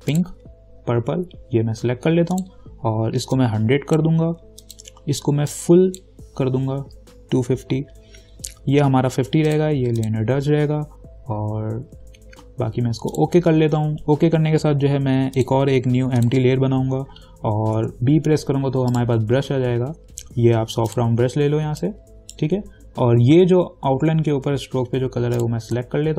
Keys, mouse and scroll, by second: 2.5-9.7 drag, 13.3 click, 15.6 click, 18.0 b, 19.1 right click, 21.1 click, 22.0-25.6 alt+right drag, 25.6 alt+click.